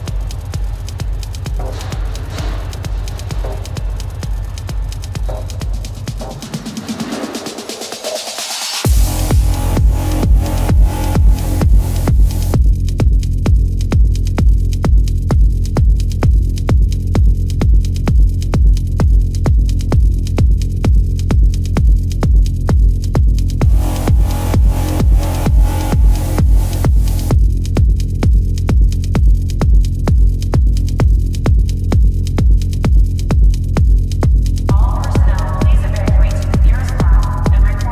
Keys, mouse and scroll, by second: 0.0 space, 1.0 ], 1.2 ctrl+alt+z, 1.3 ], 1.8 ctrl+alt+z, 3.9 ], 6.6 ctrl+alt+z, 7.8 ctrl+alt+z, 9.4 ctrl+alt+z, 9.5 ctrl+-, 9.7-11.8 typing, 11.3 ctrl+alt+z, 12.9 ctrl+alt+z, 12.9 ], 13.1 ctrl+alt+z, 13.5 ctrl+alt+z, 14.3 ctrl+=, 15.5 ctrl+alt+z, 20.4 ctrl+alt+z, 21.2 ctrl+alt+z, 22.0 ctrl+alt+z, 24.2 ctrl+alt+z, 27.9 ctrl+alt+z, 30.2 ], 33.4 space, 37.2 ctrl+=.